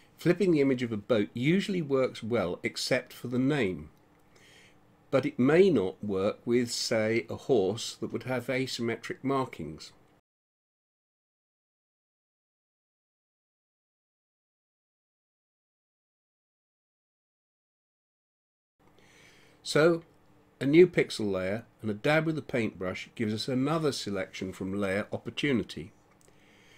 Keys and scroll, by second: 18.4 x.